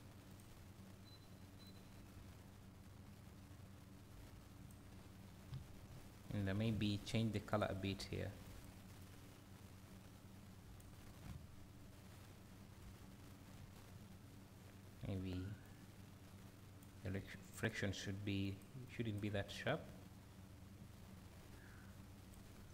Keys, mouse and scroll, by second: 8.5 click, 11.0 scroll down 1, 11.2 `, 15.6-18.4 drag, 22.6 scroll down 1.